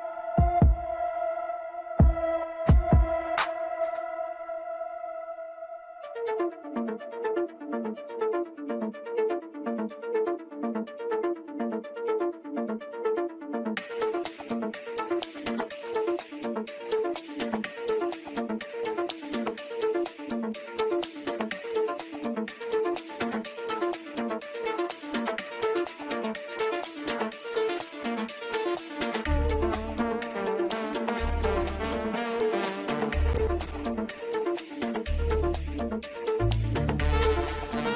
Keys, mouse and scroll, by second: 1.4-2.3 scroll up 6, 2.3-5.6 shift+middle drag, 5.6 ctrl+click, 7.0 ctrl+click, 8.1-9.1 scroll down 3, 9.1-10.5 middle drag, 10.5 ctrl+click, 13.2 shift+click, 14.8-17.5 scroll down 5, 19.4 click, 21.1-25.7 drag, 25.7 Tab, 27.4 scroll up 6, 28.1-28.4 scroll down 4, 28.9-29.9 shift+middle drag, 29.9 scroll down 1, 30.2-33.3 middle drag, 36.0-37.9 middle drag.